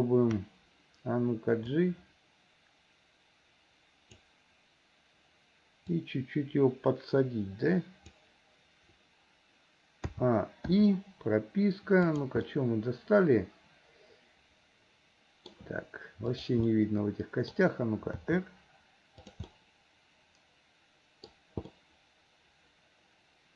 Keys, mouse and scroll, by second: 1.9-4.3 drag, 6.1-8.3 drag, 10.1 a, 10.8 i, 12.1 click, 12.5-15.5 middle drag, 16.4 click, 16.7 middle click, 18.2 r, 19.5-21.3 middle drag, 21.7-23.5 middle drag.